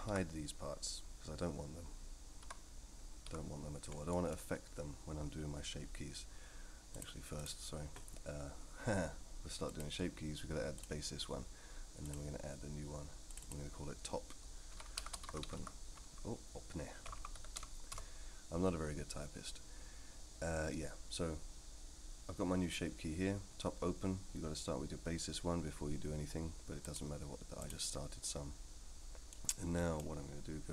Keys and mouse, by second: 0.1 h, 2.4 l, 3.3 h, 4.1 middle click, 6.9-7.4 drag, 9.7 click, 13.3-18.5 drag, 17.1 BackSpace, 26.8-27.7 drag, 29.3 middle click.